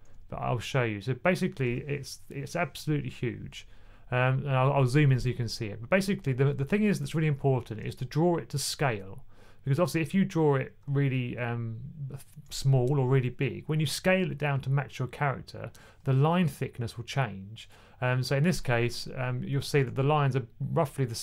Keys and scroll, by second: 3.8 typing, 6.3-7.4 typing, 12.6-13.3 typing, 19.4-19.7 typing.